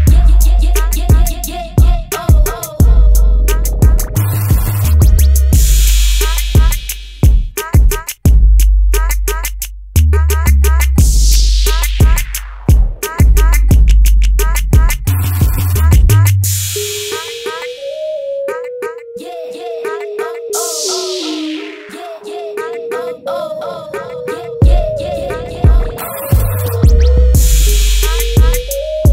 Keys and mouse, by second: 1.5-3.6 drag, 6.9-9.0 drag, 10.3-11.5 drag, 11.5-16.0 middle drag, 20.1 Delete, 21.6 Delete, 25.8 click, 26.6 middle click, 27.0 middle click, 27.6-28.8 drag.